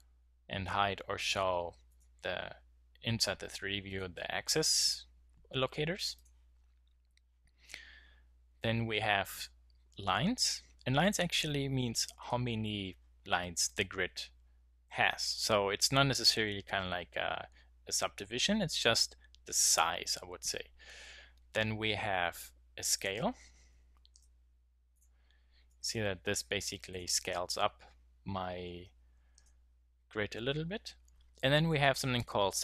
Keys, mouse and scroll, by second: 1.4 middle click, 1.5 middle click, 5.7 middle click, 7.9 middle click, 8.0 middle click, 12.6 middle click, 24.6 middle click, 26.6 middle click, 28.6 middle click, 28.8-32.2 middle drag.